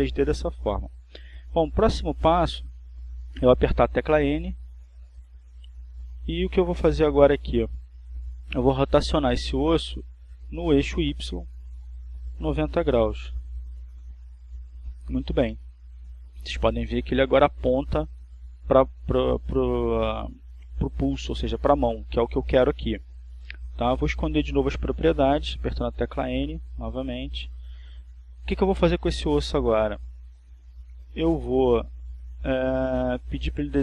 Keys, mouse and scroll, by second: 8.6 n, 10.3-12.7 drag, 16.0 click, 17.0-17.9 typing, 30.6 n.